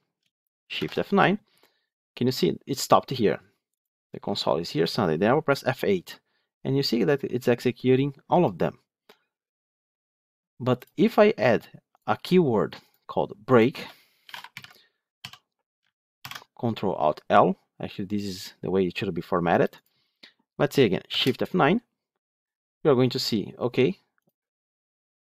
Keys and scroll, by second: 0.6 shift+F9, 5.7 F8, 10.7 F9, 16.2 ctrl+alt+l, 21.0 shift+F9.